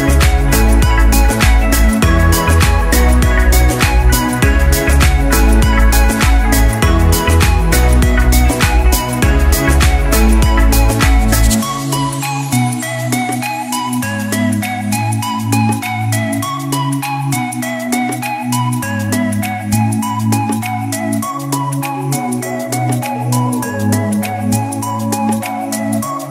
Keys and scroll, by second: 15.3 Up, 16.0 Up, 16.3 Up, 16.5 Up.